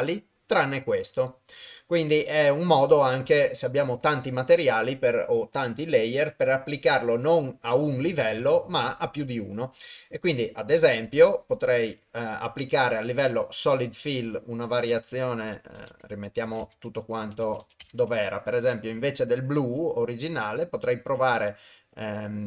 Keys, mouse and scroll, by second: 2.0 click, 10.0-11.7 drag, 13.8 click, 14.8-16.0 drag, 16.3 click, 17.1 click, 20.3-22.4 drag.